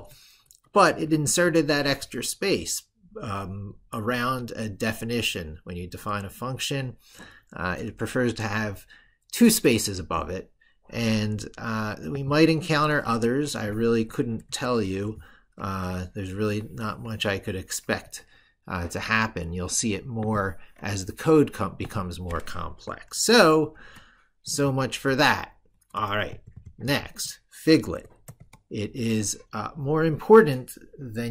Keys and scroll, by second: 22.9 ctrl+super+Left.